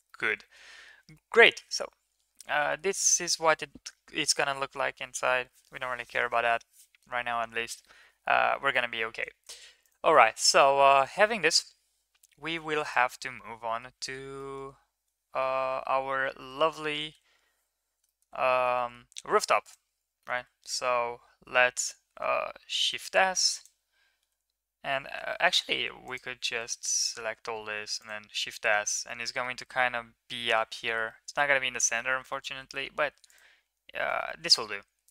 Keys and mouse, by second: 0.0 middle click, 0.4 ctrl+s, 1.1-1.6 middle drag, 2.7 shift+middle click, 2.9 middle click, 7.8-8.3 middle drag, 9.3 ctrl+s, 9.8 middle click, 10.2 middle drag, 10.4 middle click, 12.1 KP_1, 12.9 middle drag, 13.6 shift+middle click, 14.2 Tab, 14.4 middle click, 15.5 1, 16.6 Tab, 17.1 Tab, 18.0 shift+middle click, 18.7 shift+middle drag, 20.3 shift+a, 22.7 shift+s, 24.3 Tab, 25.1 Tab, 26.0 alt+click, 27.4 shift+s, 29.0-29.4 middle drag, 31.0 shift+middle click, 32.7 middle click, 33.7 Tab, 34.2 shift+middle click, 35.0 ctrl+a.